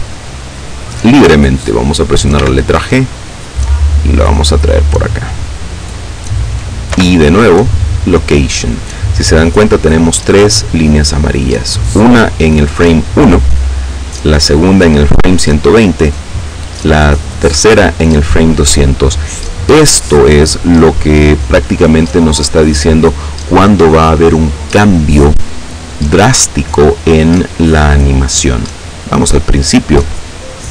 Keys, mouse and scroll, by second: 1.8 g, 4.4 click, 6.6 i, 7.6 click, 28.9 click.